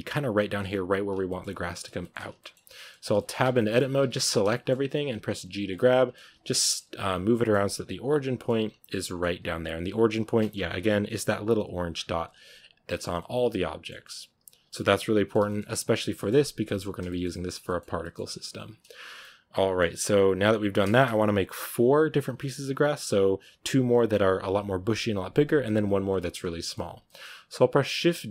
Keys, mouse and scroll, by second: 0.9-1.5 scroll down 2, 1.1 middle click, 1.9-2.9 shift+middle drag, 2.9 scroll down 2, 3.0 shift+middle click, 3.3 Tab, 3.4-3.9 scroll up 2, 3.4 middle drag, 3.9 a, 4.0 a, 4.4-4.9 shift+middle drag, 4.9 g, 5.6 middle click, 6.1 g, 6.4 middle click, 6.7 g, 7.2 middle click, 7.5 g, 8.0 middle click, 8.5-8.9 scroll up 2, 8.9 middle click, 9.1 g, 10.2 middle drag, 10.4 Tab, 10.6-11.4 scroll up 5, 11.7 scroll down 4, 11.9 Tab, 12.3 g, 12.7 scroll down 2, 12.8 middle click, 12.9 Tab, 13.1-13.8 middle drag, 13.8 Tab, 14.2 g, 14.6-15.9 middle drag, 15.9 Tab, 16.0-18.5 middle drag, 18.5-19.1 scroll down 1, 19.1-20.6 middle drag, 20.6 scroll down 1, 20.7-26.2 shift+middle drag, 26.2 scroll up 1, 26.5-28.3 middle drag.